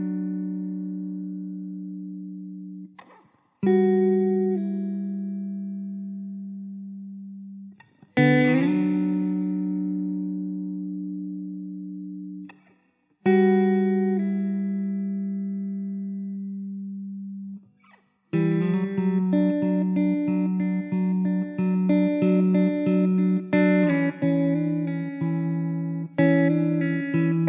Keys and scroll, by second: 7.6 z, 15.8 ctrl+s, 18.8 z, 20.7 KP_0, 21.5 ctrl+s.